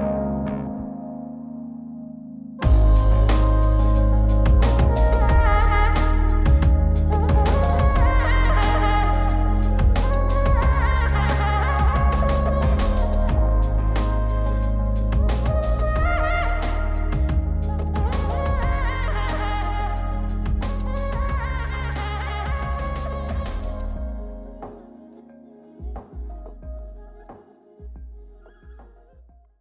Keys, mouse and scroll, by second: 2.4 click, 3.3-4.9 drag, 7.3 click, 9.5-11.0 drag, 11.6-12.5 scroll down 2, 12.5 click, 14.6 scroll down 2, 15.3-16.5 scroll down 3, 16.5 click, 18.1 click, 19.8 click, 21.9 click, 23.1-23.8 scroll down 2, 23.8 click, 24.8 click, 26.5 click, 27.9 click, 28.7 click.